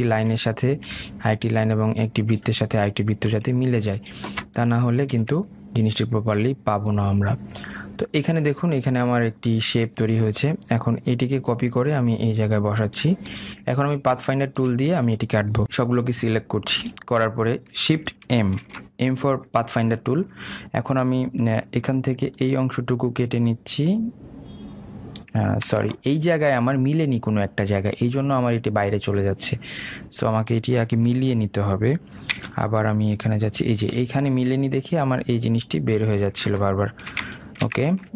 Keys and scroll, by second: 26.8 ctrl+z.